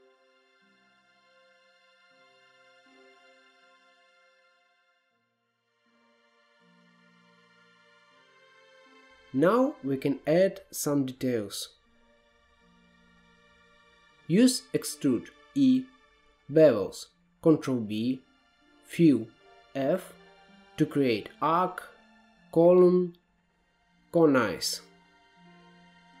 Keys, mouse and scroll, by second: 0.0-1.4 typing, 1.9 middle click, 2.5 click, 2.7-3.2 f, 3.4 f, 3.6 f, 4.2 middle click, 5.0-5.4 scroll up 3, 5.4-5.8 scroll down 3, 5.8 middle click, 6.2 Tab, 7.1 Tab, 7.5 middle click, 8.2 alt+z, 12.3 ctrl+r, 14.4 3, 14.7 click, 15.1 e, 16.2 middle click, 17.0 scroll up 1, 17.2-19.4 typing, 17.4 click, 18.3 middle click, 18.7 click, 19.8 click, 19.9 middle click, 20.5 click, 20.7 middle click, 21.2-22.2 middle drag, 22.5 ctrl+b, 25.0 scroll up 1, 25.2 middle click, 25.7 Tab, 26.0 Tab.